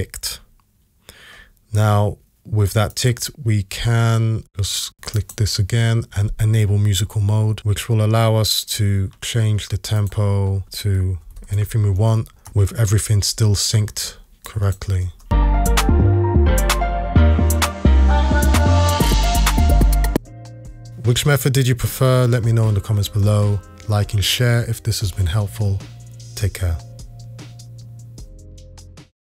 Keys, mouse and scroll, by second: 11.2-11.6 typing, 12.5 Return, 15.0 space.